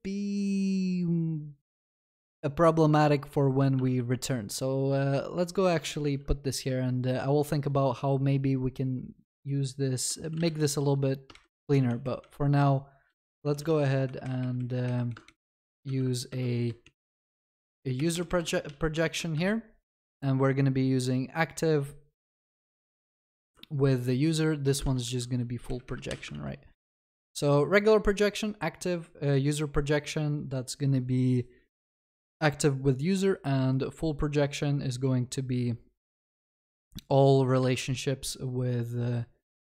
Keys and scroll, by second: 3.9 ctrl+c, 11.3 ctrl+shift+Left, 14.1 Escape, 23.5 ctrl+c, 26.1 ctrl+s, 37.7 ctrl+c.